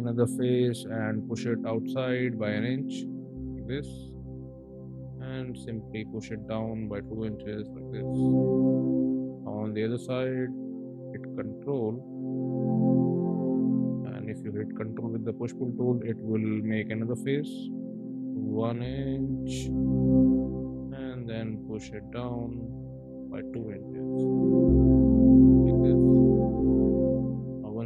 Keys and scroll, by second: 2.6 1, 2.9 Return, 6.4 2, 6.8 Return, 7.2 space, 9.8 p, 11.1 space, 13.2 p, 18.0 1, 19.0 Return, 21.5 p, 22.8 2, 23.3 Return, 23.6 space.